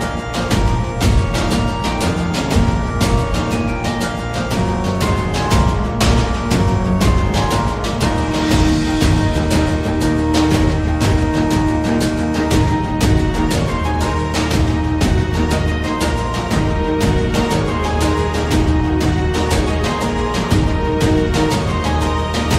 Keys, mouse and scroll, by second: 0.0 click, 0.5 click, 2.0 middle click, 3.1 Tab, 3.4 click, 4.2 middle click, 6.1 shift+click, 6.9 middle click, 7.6 shift+middle click, 9.8-11.1 drag, 11.3 middle click, 11.8 shift+middle click, 12.6 g, 16.4 g, 19.3 Tab, 19.9 middle click, 20.9 middle click, 20.9 a, 21.6 a, 22.2 Tab.